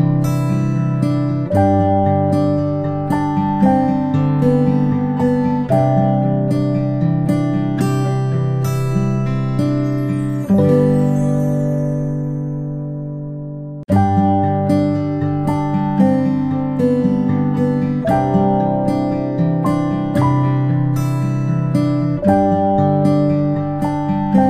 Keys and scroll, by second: 0.6 p, 7.0-7.6 ctrl+space, 12.3 ctrl+z.